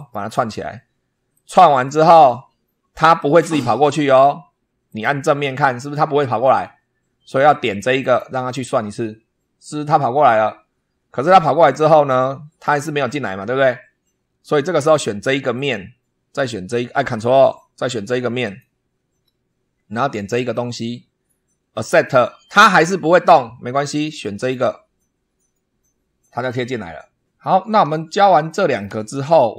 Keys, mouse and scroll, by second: 1.2 click, 4.8 click, 7.9 click, 11.3 middle click, 13.8-14.3 scroll up 3, 15.4 click, 18.3 ctrl+click, 20.4 click, 21.6 click, 24.3 click, 28.0 shift+click, 29.0 shift+scroll up 1.